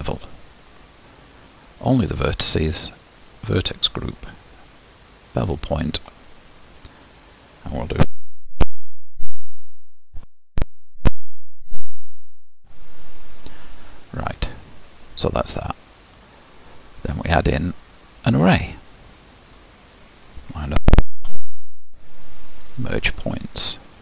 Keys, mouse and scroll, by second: 0.0-3.4 drag, 5.5 click, 6.1-8.5 scroll up 1, 8.9-16.7 drag, 18.5-22.9 drag.